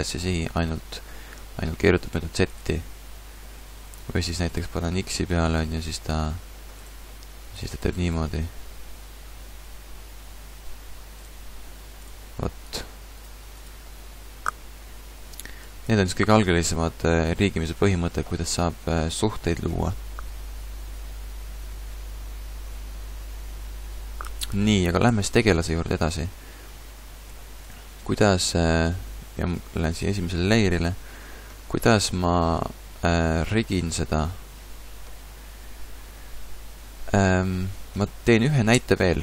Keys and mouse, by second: 2.1-4.3 drag, 4.5 click, 5.6 g, 7.1-8.7 drag, 7.6 g, 12.0-13.1 drag, 13.7-15.5 drag, 18.6-25.1 middle drag, 25.1 a, 25.3 a, 26.0 x, 27.3 x, 29.9 click, 38.7 2.